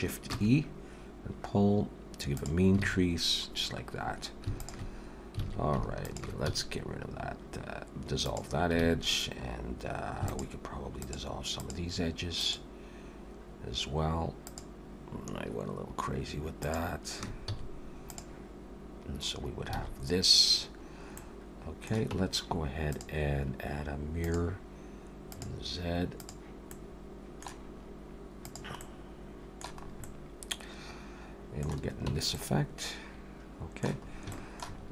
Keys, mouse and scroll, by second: 0.3 shift+e, 2.8 alt+a, 3.1-3.4 scroll down 3, 4.6 alt+shift+click, 5.4 alt+a, 6.0 alt+shift+click, 6.4 x, 8.8 alt+a, 10.3 alt+shift+click, 12.5 alt+shift+click, 16.7 alt+shift+click, 17.5 x, 19.7 alt+a, 20.6-21.0 scroll down 1, 21.2 middle click, 21.2 scroll down 2, 22.1 Tab, 22.9 click, 25.3 click, 26.2 click, 26.7 middle click, 28.3 click, 28.8 middle click, 29.8 scroll up 2, 30.0 middle click, 32.1 Tab, 32.4 middle click, 34.1 scroll up 2, 34.3 shift+middle click, 34.8-34.9 scroll up 2.